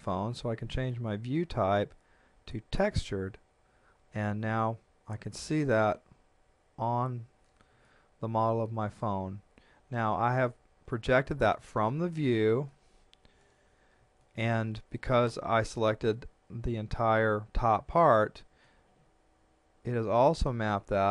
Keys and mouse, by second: 0.9 click, 7.8 shift+middle click, 12.6 KP_1, 14.2 shift+middle click, 18.6 middle click.